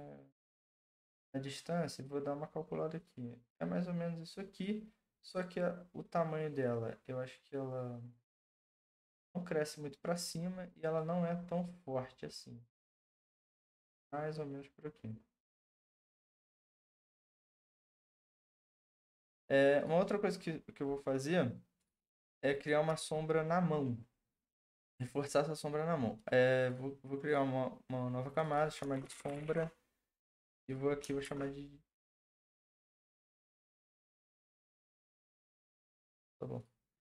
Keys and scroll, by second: 28.7-29.9 typing, 31.0-35.5 typing.